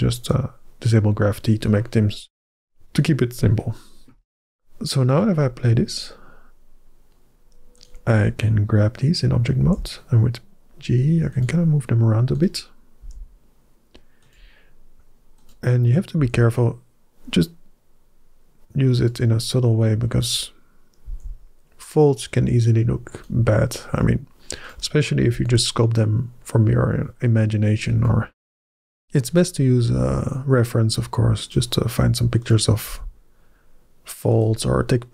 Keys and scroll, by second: 9.5 g, 12.8 g, 16.0 g, 20.9 g, 25.2 g, 29.8 g, 32.7 g.